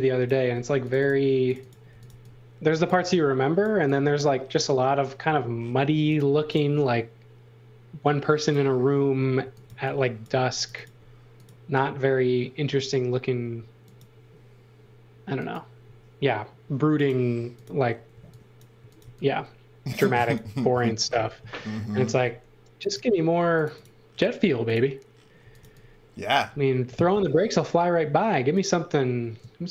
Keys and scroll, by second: 0.0-0.5 typing, 1.6-2.6 typing, 5.2 x, 5.9 space, 9.4 x, 9.6 v, 10.3 space, 18.1-19.5 typing, 21.3 space, 25.1-26.1 typing, 27.1 m.